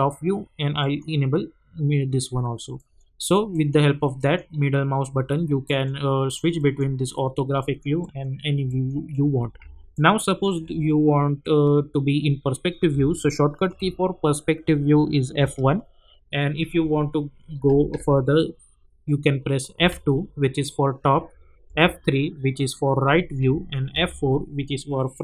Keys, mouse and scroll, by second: 0.8 middle click, 9.9-10.5 alt+middle drag, 12.9 alt+middle click, 13.1-13.8 alt+middle drag, 15.4 F1, 19.7 F2, 21.6 F3, 23.9 F4.